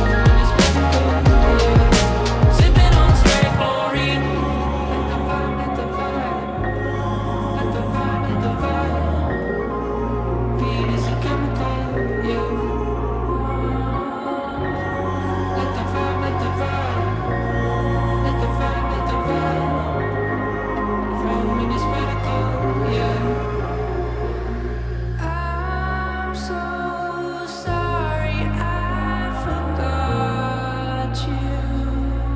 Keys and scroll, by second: 3.9 x, 4.5 x, 9.8-10.7 typing, 12.2-15.4 typing, 16.4 alt+x, 16.9 x, 18.9-20.1 typing, 21.9-24.6 typing, 26.8 f, 31.5 shift+d, 32.1 x.